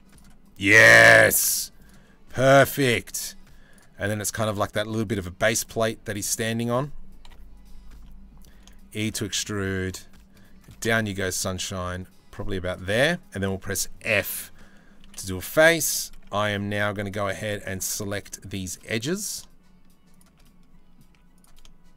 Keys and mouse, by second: 2.3 g, 5.0 g, 6.8 ctrl+l, 7.6 click, 8.2 e, 8.8 click, 10.2 g, 14.7 f, 15.0 click, 15.4 1, 16.8 2, 17.0 click, 18.2 shift+middle click, 18.4 click, 20.0 click, 20.7 z.